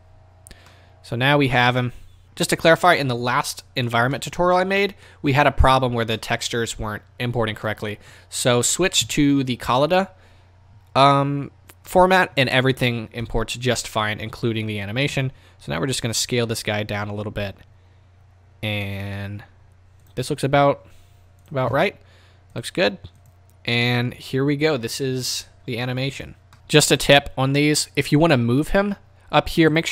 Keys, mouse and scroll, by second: 0.7-1.5 middle drag, 1.5-1.9 scroll up 2, 1.6-2.1 middle drag, 2.2-6.1 middle drag, 6.1 scroll up 2, 6.3-7.0 middle drag, 7.0-7.7 scroll down 2, 7.7-21.5 middle drag, 7.7 scroll up 2, 13.2 KP_0, 15.3 s, 20.2 click, 22.7-23.4 drag, 26.3 click, 26.5 click, 26.5 z, 27.1-29.8 middle drag, 29.8 click.